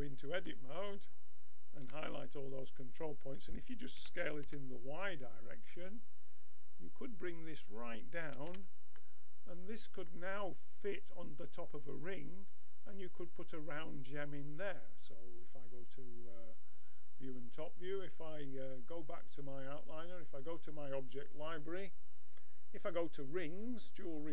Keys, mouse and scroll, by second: 1.8 a, 4.0 s, 8.2 a, 8.5 Tab, 8.9-12.0 middle drag, 15.6-17.4 drag, 17.4-19.0 middle drag, 19.0-22.3 drag.